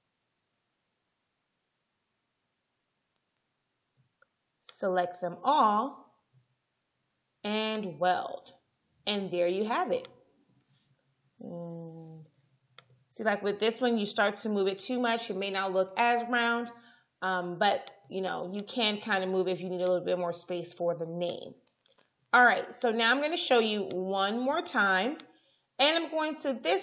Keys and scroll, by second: 11.3 shift+Down, 14.4 shift+Up.